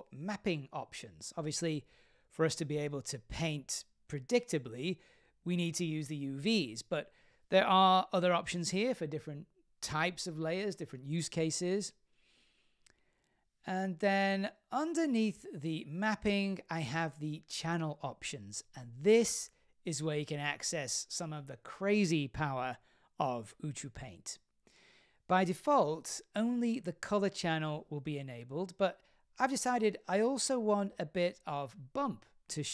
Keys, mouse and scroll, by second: 0.3 click, 2.6-13.5 drag, 15.3 click, 18.3 click, 19.8-20.8 scroll up 6, 20.3 middle click, 29.1 click, 30.0 click.